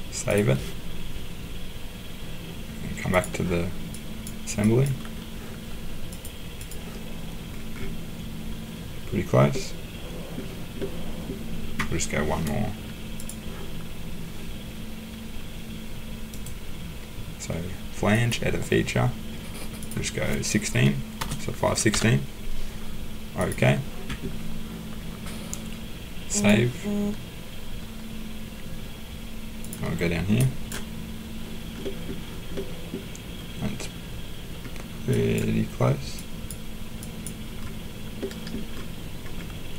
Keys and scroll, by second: 21.2 BackSpace, 21.9 6.